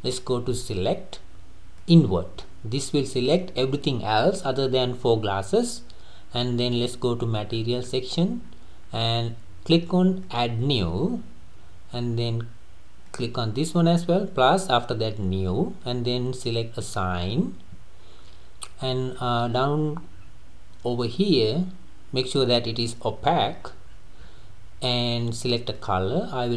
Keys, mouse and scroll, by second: 0.6-2.4 drag, 2.4 scroll up 1, 2.5-5.5 middle drag, 7.5-8.0 scroll up 9, 8.4 scroll up 4, 10.2-16.1 drag, 16.8-18.7 drag, 18.7-20.6 scroll down 23, 23.6-24.7 scroll up 13, 25.1 scroll up 3, 25.8 click.